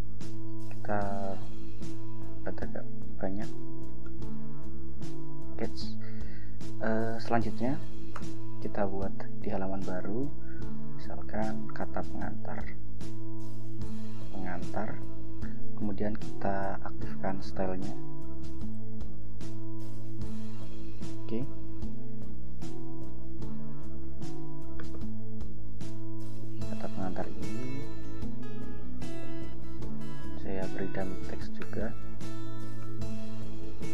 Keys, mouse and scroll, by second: 0.9 Return, 2.4 ctrl+b, 3.5 ctrl+b, 6.1 scroll down 2, 6.6 scroll up 2, 8.3 ctrl+Return, 12.7-15.6 typing, 16.9-17.6 drag, 18.6 click, 20.2 click, 21.1 scroll down 2, 23.1 ctrl+Right, 25.0 click, 26.1 Right, 27.4 Return, 29.3 ctrl+j, 30.3 ctrl+v, 31.7 ctrl+Return, 32.2 ctrl+v, 33.1 Return, 33.7 ctrl+v.